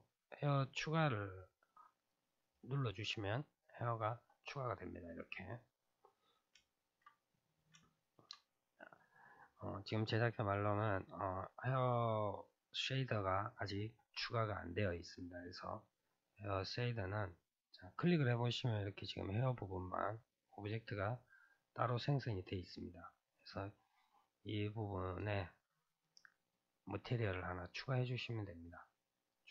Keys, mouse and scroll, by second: 2.1-4.9 drag, 4.9-6.0 middle drag, 6.0 scroll down 2, 6.6-11.6 shift+middle drag, 16.8 click, 19.5-23.9 middle drag, 24.7 click, 26.4-29.5 drag.